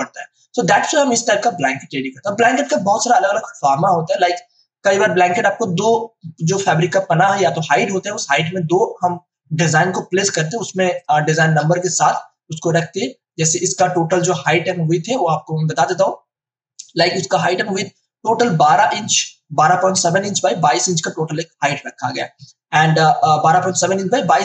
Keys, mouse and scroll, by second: 10.6 space, 10.9 ctrl+click, 13.8 space, 13.9 click, 14.3 space, 14.5 m, 15.7-24.4 drag.